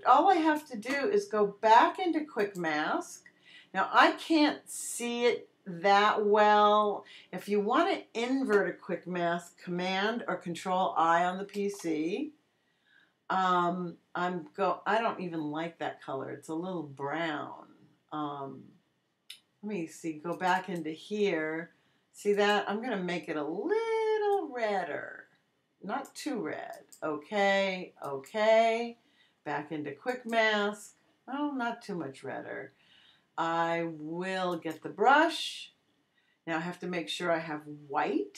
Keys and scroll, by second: 11.5 super+i.